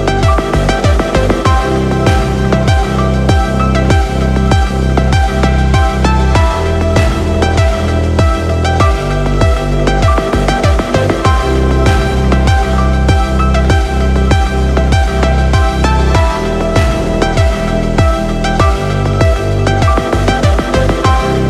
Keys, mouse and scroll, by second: 0.6 space, 3.0 click, 4.6 click, 6.9 click, 7.9-9.4 drag, 10.3 space, 11.5 click, 15.7 space, 15.8-18.1 drag.